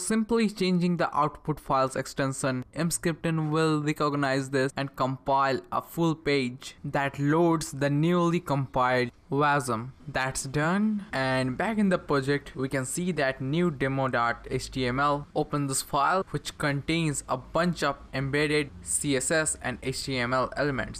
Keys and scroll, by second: 3.9 Return, 12.0 ctrl+c, 13.1 Up, 13.7 Return, 19.3 Return.